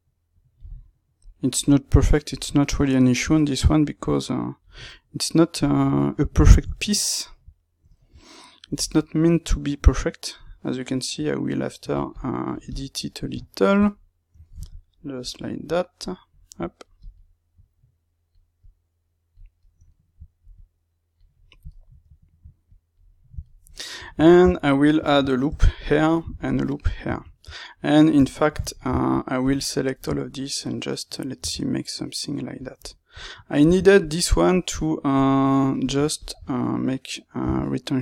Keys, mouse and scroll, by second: 0.8 middle click, 1.6 click, 2.4-3.8 middle drag, 3.8 click, 4.7-10.4 middle drag, 10.4-13.4 drag, 13.4-15.6 ctrl+middle drag, 15.6 click, 16.1 middle click, 16.6-19.5 drag, 19.5 ctrl+middle click, 20.4 click, 21.3-22.6 shift+middle drag, 22.6 click, 23.0-26.0 middle drag, 24.4 Tab, 25.4 ctrl+r, 26.0 right click, 26.2 ctrl+r, 26.6 right click, 26.8-29.3 middle drag, 28.2 Tab, 29.3 click, 29.9 ctrl+right click, 31.3 g, 32.6 click, 33.5 ctrl+r, 35.8 click, 36.4-38.0 middle drag, 37.4 g.